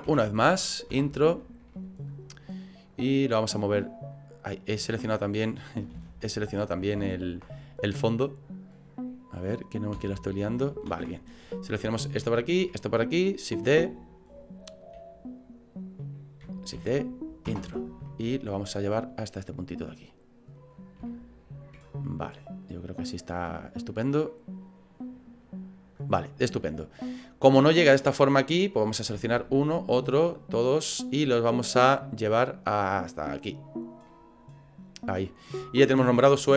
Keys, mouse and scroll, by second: 0.0 shift+d, 1.7 middle click, 3.3 click, 5.9 ctrl+z, 7.1 ctrl+z, 8.7 right click, 10.0 Delete, 11.0 ctrl+z, 11.5 right click, 12.3 shift+right click, 16.9 shift+d, 18.4 click, 20.7 scroll up 5, 21.0 shift+middle click, 22.6 right click, 24.3 middle click, 25.4 right click, 25.9-26.3 scroll down 8, 28.8 right click, 29.4 shift+right click, 29.9 right click, 30.3 right click, 30.5 right click, 30.9 right click, 32.3 click, 34.1 middle click.